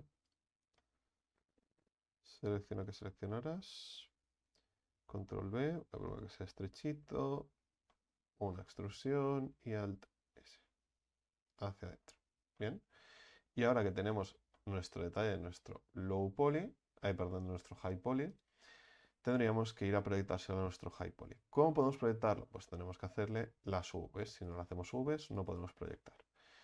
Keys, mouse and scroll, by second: 0.8 middle click, 1.5-2.0 scroll up 3, 2.3 ctrl+alt+shift+right click, 2.4-2.8 ctrl+alt+shift+right drag, 3.3-3.8 middle drag, 3.8-4.5 scroll up 1, 4.5 ctrl+b, 6.5-8.5 middle drag, 8.5 e, 9.6 alt+s, 11.7 Tab, 12.0-12.6 scroll down 4, 12.6-18.3 middle drag, 18.3 click, 18.8 click, 19.4 right click, 19.9 Tab, 20.6 a, 20.8 a, 23.4 click, 24.0-24.5 scroll up 4, 24.5 right click, 25.3 alt+shift+right click, 25.5 alt+shift+right click, 26.0 middle click, 26.5-26.6 scroll down 6.